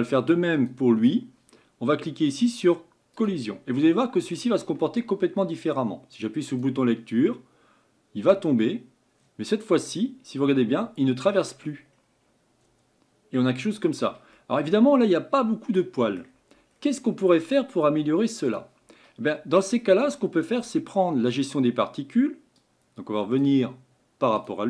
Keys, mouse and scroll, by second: 3.3-3.8 drag, 3.8 middle click, 4.6 scroll down 2, 6.6-9.6 drag, 10.0-12.1 middle drag, 12.1-13.5 scroll up 5, 13.9-14.4 drag, 14.4-16.7 middle drag, 16.7 scroll down 3, 18.6-19.0 drag, 19.0 scroll down 1, 19.8 scroll down 1, 22.7-24.5 drag.